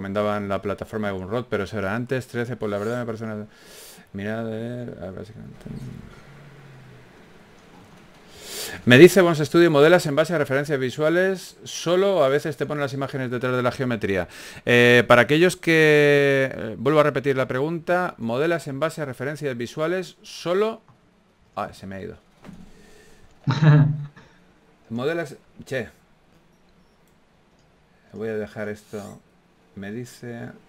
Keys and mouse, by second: 0.5 a, 0.8 right click, 1.2 g, 3.1 a, 4.9 g, 7.3 a, 8.5 Tab, 8.9 z, 9.8 b, 11.2 o, 11.2 s, 14.4 s, 15.6 Tab, 15.8 z, 16.2 r, 17.8 Tab, 18.3 s, 18.9 a, 19.3 alt+s, 21.3 Tab, 23.2 alt+r, 23.8 s.